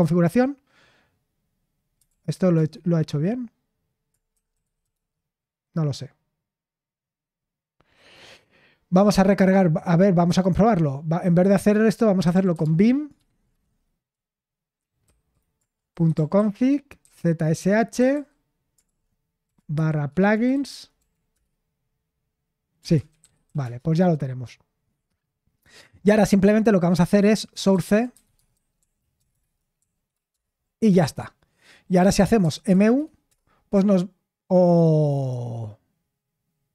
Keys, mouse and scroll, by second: 2.0 ctrl+p, 2.5 Return, 4.2-5.3 typing, 11.9-13.5 typing, 15.8-21.3 typing, 22.8-23.9 typing, 27.2-29.3 typing, 28.7 Right, 29.7 Right, 29.9 Right, 30.3 Return, 32.4 typing, 33.2 Return.